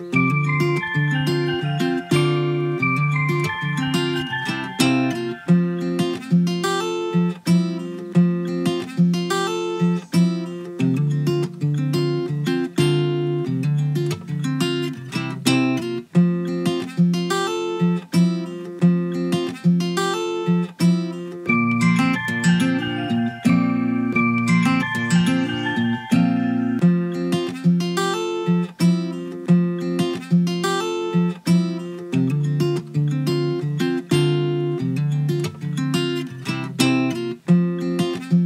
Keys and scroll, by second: 21.2 ctrl+z, 36.8 ctrl+a.